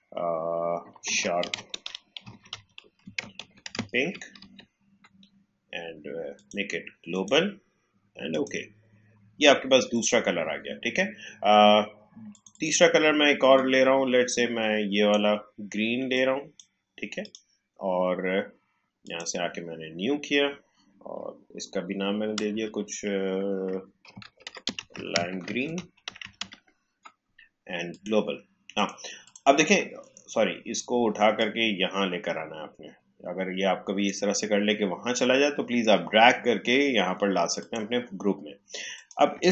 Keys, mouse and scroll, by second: 0.9 shift+s, 1.4 h, 3.6 i, 6.3 click, 12.3-17.1 drag, 22.3 click, 22.5 shift+g, 23.7-25.7 typing, 27.9-37.5 drag.